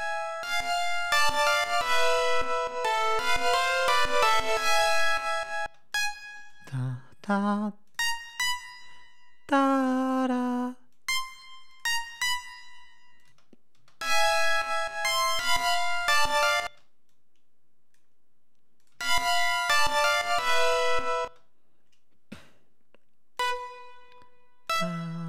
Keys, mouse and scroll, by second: 1.5 ctrl+scroll up 2, 3.6 d, 4.1 ctrl+scroll down 2, 4.5 ctrl+scroll up 2, 5.5 space, 5.8 click, 6.4 click, 7.7 click, 8.2 click, 9.6 click, 10.8 click, 11.6 click, 12.0 click, 13.1 click, 13.2 space, 15.2 ctrl+scroll up 2, 16.5 space, 17.0-18.0 drag, 18.7 click, 18.8 space, 19.2 ctrl+scroll down 2, 19.5 ctrl+scroll up 2, 20.0-20.7 ctrl+scroll down 4, 21.1 space, 22.3 scroll down 2, 23.2 click, 24.5-25.2 drag.